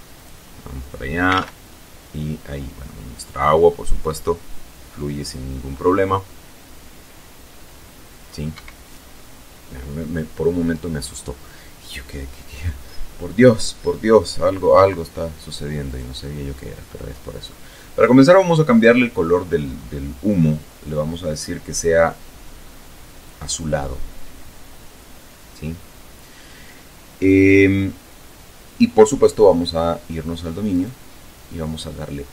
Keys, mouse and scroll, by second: 0.4 Escape, 7.0 Escape, 14.3 right click, 16.8 click, 17.8-18.6 scroll up 2, 18.8-19.1 scroll up 2, 21.8 click, 29.2 right click, 30.2-30.6 scroll down 2, 31.9 click.